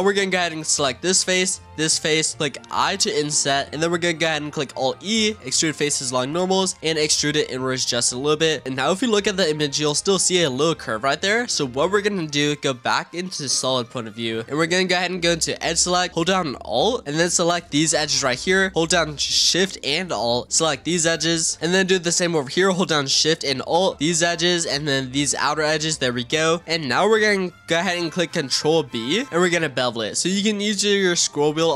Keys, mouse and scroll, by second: 0.5 middle click, 1.4 shift+click, 1.8-2.9 middle drag, 2.9 i, 4.6 alt+e, 6.8-8.6 middle drag, 8.6 click, 11.1-12.3 middle drag, 12.3 z, 14.4-14.7 drag, 17.6 alt+click, 20.7 alt+shift+click, 21.6-23.2 scroll up 1, 23.9 alt+shift+click, 25.1 alt+shift+click, 26.1-28.7 middle drag, 28.8 ctrl+b.